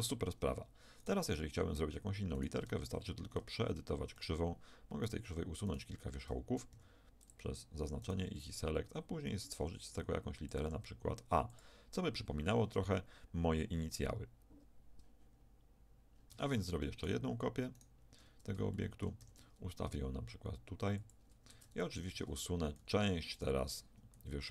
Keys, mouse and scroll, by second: 1.0-3.0 right drag, 2.6 Tab, 3.6 right click, 6.7 x, 8.4-9.6 drag, 8.4 e, 9.6 e, 11.3 e, 16.3 Tab, 17.0-20.1 right drag, 18.7-20.6 middle drag, 19.2 shift+d, 21.5 Tab, 22.1 Tab, 22.8 a, 23.4-24.5 right drag.